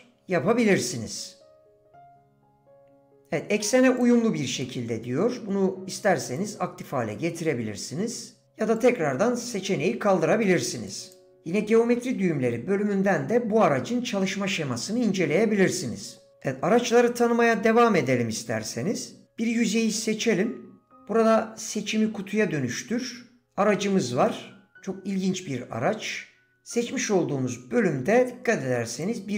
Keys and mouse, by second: 1.3-3.1 drag, 4.0 click, 4.6 middle click, 6.3 click, 8.1 click, 8.8 click, 10.9 click, 24.3-26.5 middle drag, 29.0 g.